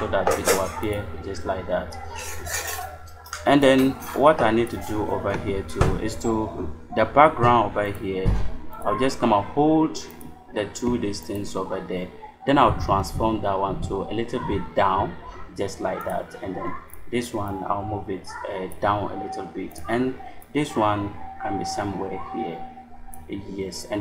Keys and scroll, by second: 12.6 shift+Down.